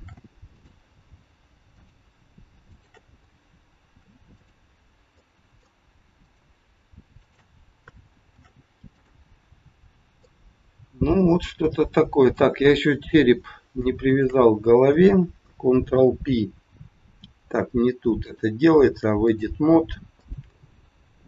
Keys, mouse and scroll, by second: 1.7 click, 2.7 shift+click, 3.8 ctrl+shift+c, 5.1 middle click, 6.2 click, 7.2 shift+click, 8.2 ctrl+shift+c, 9.5-9.8 scroll down 4, 10.2 middle click, 12.1 click, 12.8-13.1 scroll up 2, 14.1 shift+click, 15.9 ctrl+p, 18.2 click, 20.1 click, 21.2 shift+click.